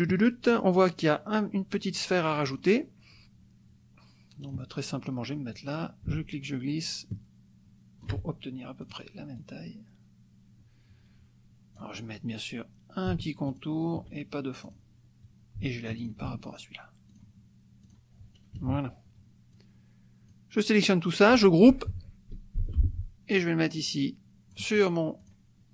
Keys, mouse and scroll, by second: 0.6 click, 2.5 click, 4.4 click, 5.5-8.2 drag, 8.8 click, 9.4-12.0 drag, 13.5 shift+click, 14.7 click, 16.0 shift+click, 17.1 click, 17.9 click, 18.6 KP_Subtract, 19.5-20.5 drag, 22.6 ctrl+g, 23.4-24.7 drag, 25.2 click.